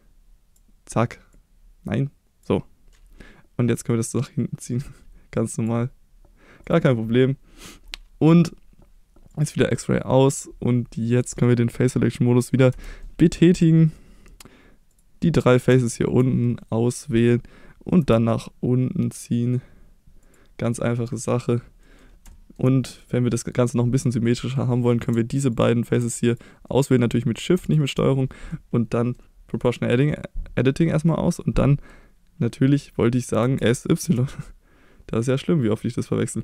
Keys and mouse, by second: 1.4-2.4 drag, 4.1-5.6 drag, 6.6 click, 9.7 middle click, 12.7 3, 13.0 middle click, 13.9 middle click, 14.9 click, 15.2 middle click, 15.8 ctrl+click, 16.4 middle click, 18.0 e, 20.2 click, 20.7 middle click, 21.8 middle click, 24.2 middle click, 24.8 middle click, 26.3 click, 26.7 middle click, 27.7 shift+click, 28.0 middle click, 29.0 middle click, 33.4 s, 34.0 y.